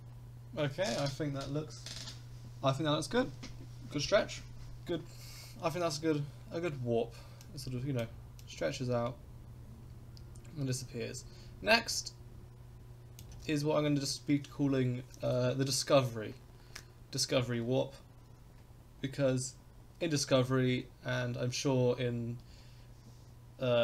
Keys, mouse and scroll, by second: 7.8 click, 8.4-13.2 drag.